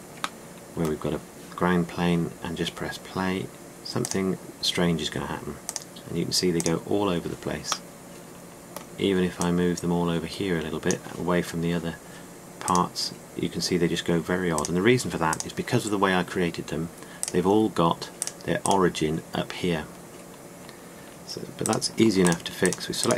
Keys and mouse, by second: 1.3-2.6 shift+drag, 4.9 click, 8.8-9.3 drag, 10.3-10.7 drag, 11.1-11.7 drag, 13.6 click.